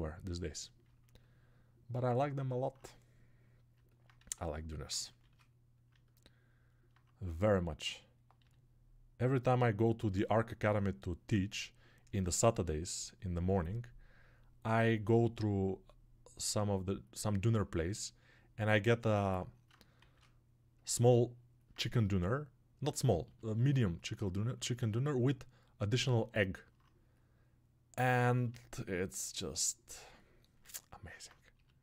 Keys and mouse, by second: 5.8-17.3 alt+middle drag, 17.3-18.5 alt+drag, 18.5 alt+right click, 18.8-20.7 alt+shift+drag, 20.7-25.8 alt+middle drag, 25.8-29.8 alt+drag, 29.8-31.8 alt+middle drag.